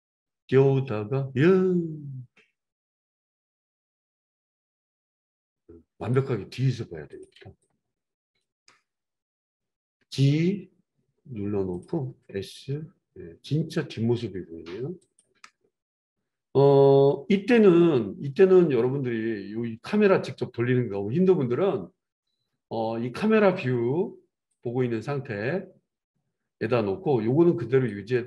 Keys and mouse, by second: 10.0 g, 11.8-24.6 middle drag, 12.0 r, 24.6-28.2 drag.